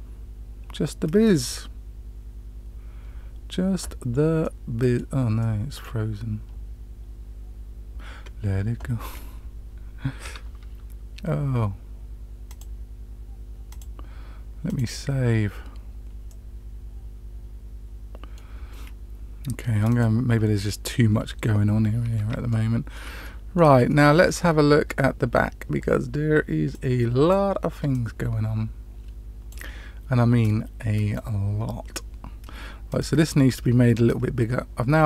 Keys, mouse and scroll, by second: 13.6-14.8 drag, 16.2-18.3 middle drag, 20.3 click, 22.1 scroll up 1, 22.4-22.9 shift+middle drag, 23.2-23.6 middle drag, 23.8-24.3 shift+middle drag, 32.8 click, 34.0-35.0 drag.